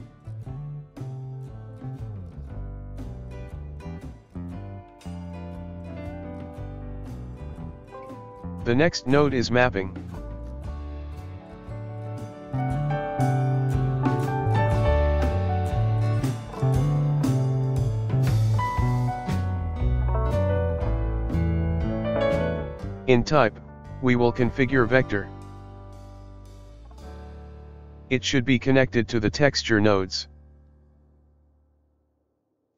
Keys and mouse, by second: 10.4-13.0 ctrl+middle drag, 16.6 click, 18.5-27.9 drag, 29.1 click.